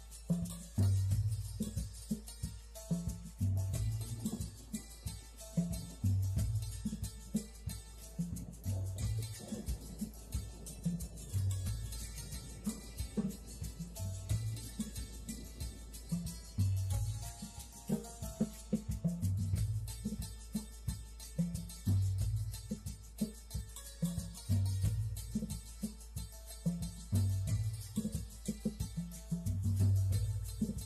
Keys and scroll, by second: 4.7 space.